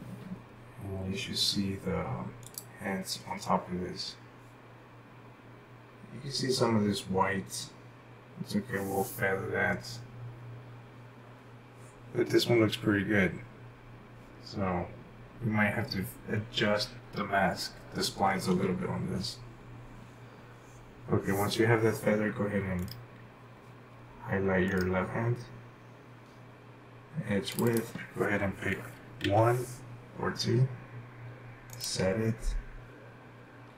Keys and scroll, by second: 29.2 1.